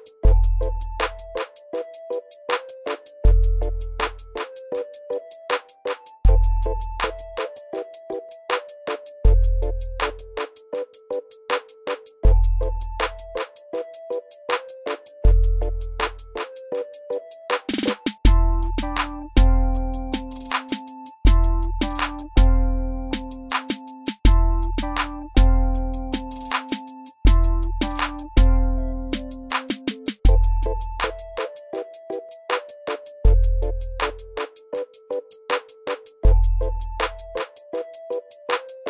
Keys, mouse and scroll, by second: 0.3 F1, 0.5 click, 3.2 click, 4.4 x, 5.0-6.4 drag, 7.6-7.9 ctrl+scroll down 2, 8.0 shift+right click, 8.7 click, 10.3 F12, 10.5 super+Up, 11.0 ctrl+scroll down 1, 11.2 shift+right click, 11.2 ctrl+scroll up 1, 11.7 shift+right click, 12.6-15.4 shift+drag, 16.7-18.2 shift+drag, 20.6 x, 21.2 click, 21.7 scroll down 1, 22.0 shift+right click, 22.6-26.2 drag, 29.6-32.7 ctrl+drag, 33.6-36.4 ctrl+drag, 34.7 ctrl+click, 37.4 x.